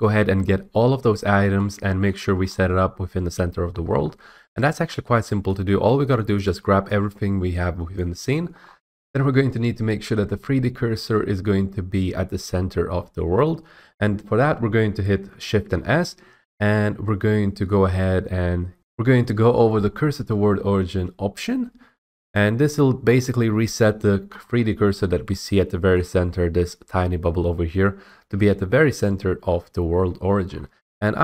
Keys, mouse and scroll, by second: 2.0 middle click, 2.2 middle click, 2.3 middle click, 2.3 middle click, 2.4 middle click, 3.6 middle click, 3.7 middle click, 3.8 middle click, 3.9 middle click, 3.9 middle click, 4.0 middle click, 5.4 middle click, 5.7 middle click, 6.0 middle click, 7.9 click, 8.5 middle click, 8.6 scroll, 15.6 s, 22.3 click, 23.0 scroll, 24.2 scroll, 25.0 scroll, 25.9 middle click, 26.2 middle click, 29.7 middle click, 29.7-30.8 scroll, 30.1 middle click.